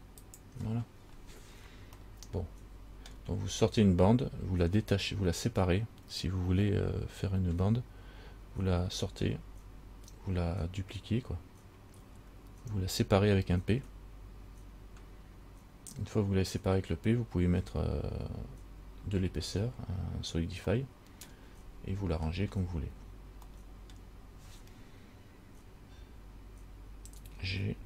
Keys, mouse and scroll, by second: 1.2-2.1 scroll down 3, 2.2 middle click, 21.0 middle click, 22.3-23.6 scroll up 1, 23.8 middle click.